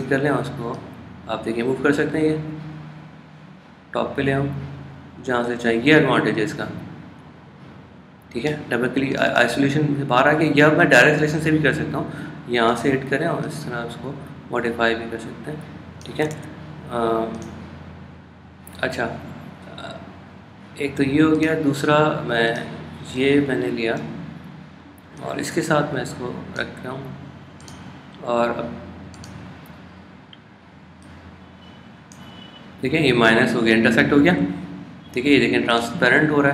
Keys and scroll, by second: 17.4 super+z.